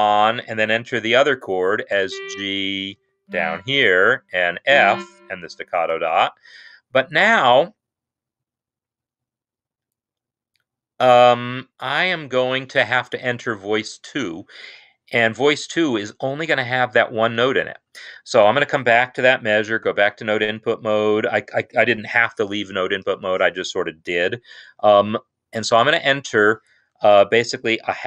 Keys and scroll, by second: 1.8 g, 3.0 ctrl+Down, 3.2 typing, 4.4 shift+f, 5.8 shift+s, 12.2 Escape, 19.7 n.